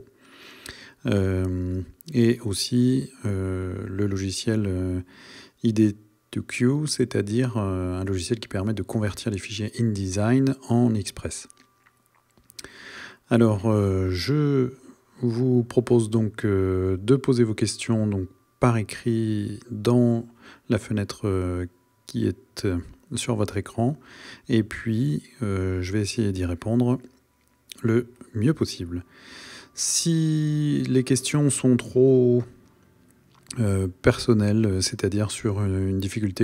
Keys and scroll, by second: 12.6 Right, 28.2 Right.